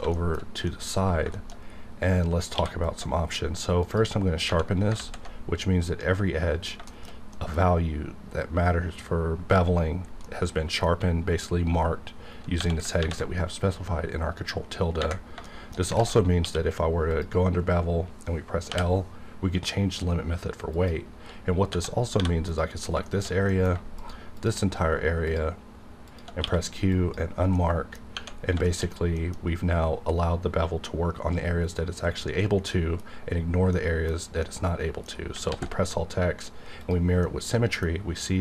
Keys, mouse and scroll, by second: 0.1 shift+middle click, 0.7 middle click, 1.7-2.1 scroll up 1, 2.5 q, 3.8 click, 4.9 alt+z, 6.7 scroll down 1, 6.9 shift+middle click, 10.2-12.6 middle drag, 13.0 ctrl+`, 15.4 shift+middle click, 15.5-15.9 scroll down 2, 16.0 alt+shift+z, 16.2 scroll up 1, 16.4 q, 17.1 click, 18.7 l, 20.7 click, 21.8-22.2 scroll up 1, 22.2 3, 22.5 click, 22.7 scroll down 1, 23.1 shift+middle click, 23.5 middle click, 24.0 shift+click, 26.4 q, 26.9 click, 27.6 middle click, 28.4 scroll down 1, 28.6 shift+middle click, 29.3 scroll down 1, 29.4 scroll up 1, 32.5 scroll down 1, 32.7-35.5 middle drag, 35.5 alt+x, 36.8 click, 37.2-38.4 middle drag.